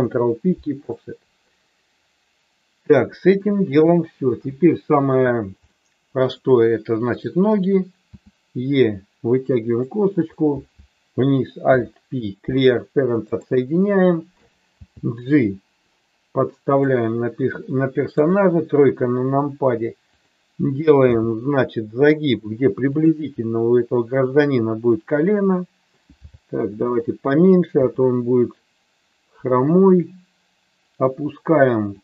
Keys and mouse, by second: 3.3 shift+middle click, 4.3 KP_1, 5.6 shift+middle click, 8.1 e, 9.7 click, 10.2 click, 11.6 alt+p, 14.7 g, 18.1 KP_3, 21.1 g, 22.8 click, 26.2 g, 27.7 e.